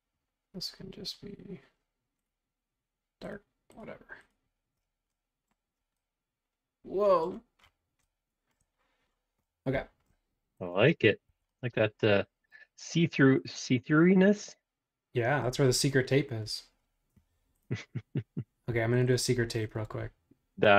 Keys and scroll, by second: 10.7 space, 11.3 Escape.